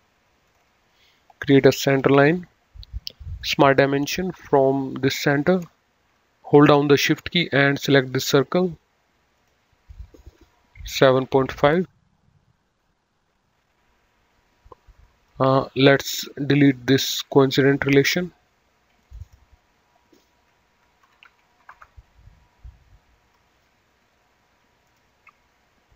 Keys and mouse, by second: 0.4 click, 1.8 Escape, 3.3 click, 4.8 click, 8.0 shift+click, 9.2 click, 10.8 KP_7, 11.3 KP_5, 11.5 KP_Enter, 13.5 click, 15.4 Escape, 16.5 click, 17.3 Delete, 18.9 click, 21.0 KP_7, 21.3 KP_Decimal, 21.5 KP_5, 21.7 Return, 23.4 Escape, 24.8 click.